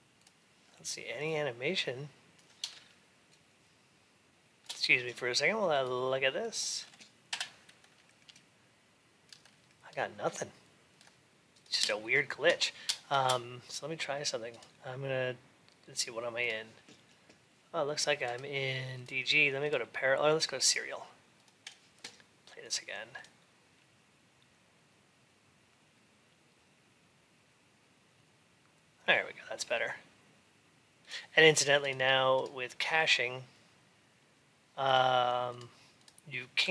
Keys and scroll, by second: 16.5 ctrl+s.